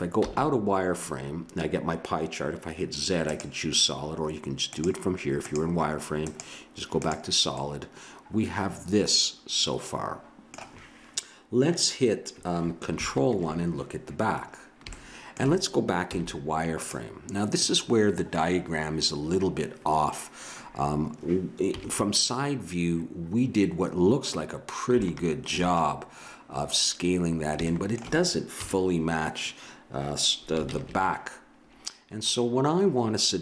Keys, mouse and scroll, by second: 0.2 z, 4.7-6.2 drag, 6.6-8.1 drag, 7.6-9.3 middle drag, 13.1 ctrl+KP_1, 16.1 z, 21.7 KP_3, 25.0 click, 25.3 middle click, 27.2 middle click, 28.6 KP_3, 30.7 ctrl+KP_1.